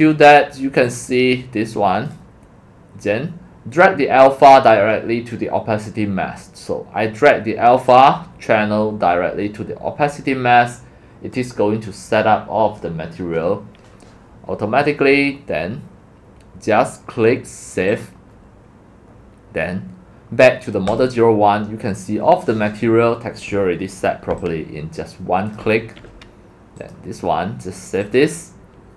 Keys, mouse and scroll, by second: 0.9-2.1 drag, 6.8 click, 7.9-9.5 drag, 9.5-11.3 right drag, 11.3-12.7 drag, 15.2-16.5 drag, 17.9 click, 18.1-19.4 drag, 20.9-22.6 drag, 22.6-23.6 scroll down 2, 23.6-24.0 scroll up 2, 24.0 scroll down 1, 24.6 click, 25.7-28.2 alt+drag.